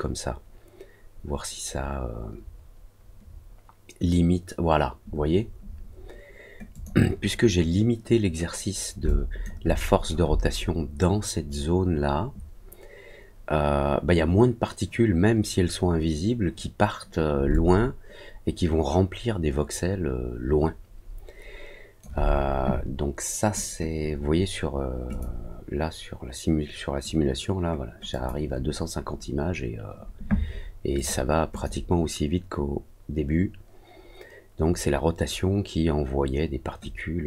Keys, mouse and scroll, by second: 6.6 click, 9.0 alt+click, 9.6 alt+middle click, 17.4-21.9 alt+drag, 25.0 click, 28.0 click, 30.9 click, 31.5 click.